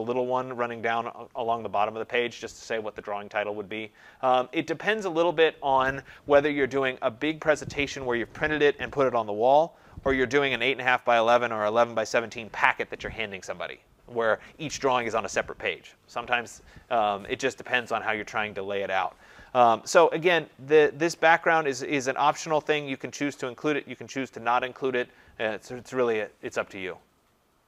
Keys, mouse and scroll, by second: 21.3-26.4 drag.